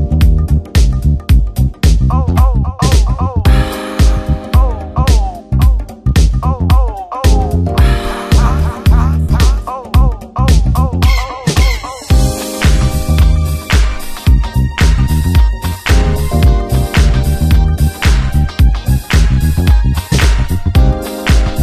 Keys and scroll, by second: 0.6 shift+F2, 1.6 ctrl+b, 3.0 Return, 3.5 ctrl+space, 5.8 Return, 6.8 ctrl+d, 7.3 ctrl+space, 7.5 ctrl+g, 9.3 ctrl+space, 9.7 Return, 13.0 ctrl+space, 14.4 s, 14.7 ctrl+d, 14.8 ctrl+space, 19.6 space.